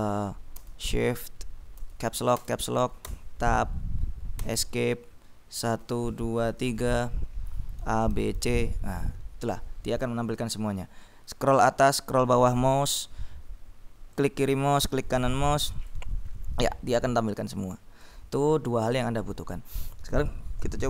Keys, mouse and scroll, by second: 1.9 Caps_Lock, 3.3 Tab, 4.5 Escape, 5.7-8.9 typing, 11.4-11.9 scroll up 2, 12.2-12.6 scroll down 2, 14.3 click, 15.0 right click, 15.8 click, 16.8 click.